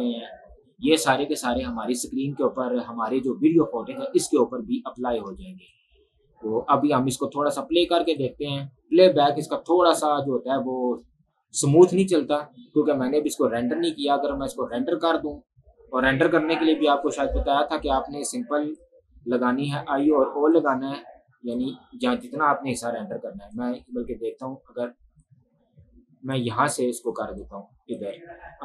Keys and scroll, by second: 5.4 space, 18.0 space.